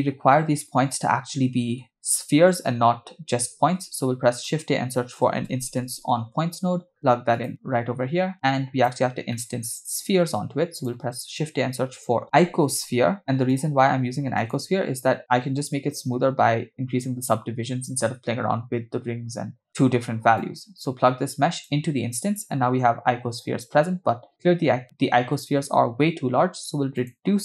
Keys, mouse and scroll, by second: 0.0-1.9 shift+middle drag, 3.7 shift+a, 8.3-8.9 drag, 9.3 middle click, 9.9 shift+a, 12.2 click, 12.2 x, 14.8 scroll up 2, 20.4-22.1 drag, 23.3 scroll down 1, 24.0-24.6 scroll down 2, 24.8-25.9 scroll down 1, 26.1 scroll up 3, 27.0-27.4 drag.